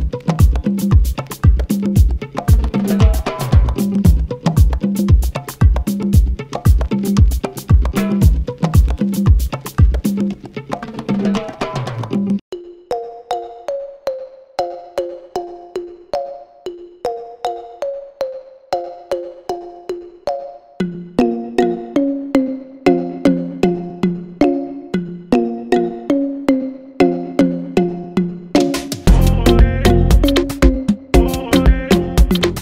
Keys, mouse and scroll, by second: 1.4 click, 1.6 r, 2.3 click, 2.4 g, 3.2 Tab, 4.3 Tab, 4.6 click, 5.1 KP_7, 6.5 Tab, 6.6 click, 7.3 shift+d, 8.3-11.1 ctrl+right drag, 11.1 r, 11.9 click, 12.7 g, 13.2 s, 14.1 click, 15.9 click, 16.4 g, 17.3-18.3 ctrl+right drag, 18.3 r, 18.9 click, 19.1 g, 20.6 click, 21.4 ctrl+right click, 21.7-22.2 scroll up 1, 22.2 click, 22.7 d, 23.6 click, 23.8 g, 24.3 click, 24.9 g, 25.8 g, 26.5 scroll down 1, 28.2 Tab, 28.3-28.7 scroll up 1, 28.7 s, 29.1 g, 30.3 click, 30.5 Tab, 31.1-31.5 scroll up 1, 31.5 click, 31.9 r.